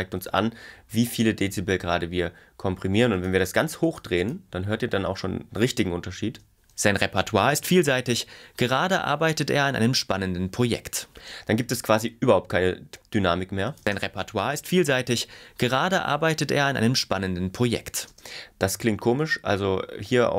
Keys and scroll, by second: 6.2 space, 11.2 space, 13.8 space, 18.1 space.